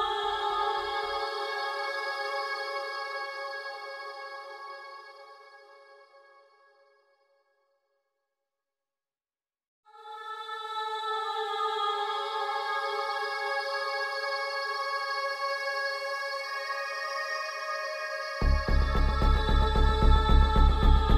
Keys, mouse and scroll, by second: 0.0-1.5 typing, 2.9 shift+t, 4.3-10.6 drag, 10.7-13.8 drag, 13.8 click, 15.4 click, 19.0-21.1 drag.